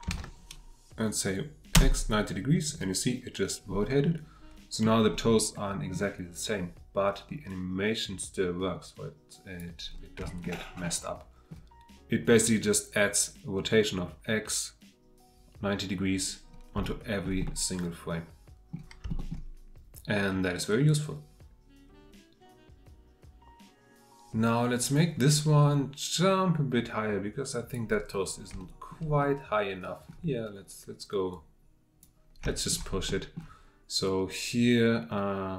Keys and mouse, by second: 3.9-4.8 middle drag, 5.5-6.1 middle drag, 7.9-9.8 drag, 10.2-16.4 shift+drag, 16.8-32.0 shift+drag.